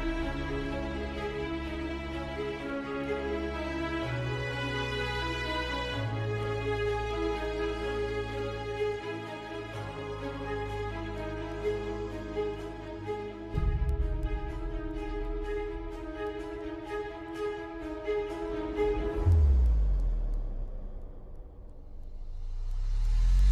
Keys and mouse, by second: 0.5 middle click, 1.6 middle click, 3.4 shift+click, 4.5-5.9 ctrl+KP_Add, 6.4 KP_3, 7.6 shift+middle click, 9.7 g, 13.5 z, 14.1 shift+middle click, 15.1 g, 20.1 shift+middle click, 21.9 r.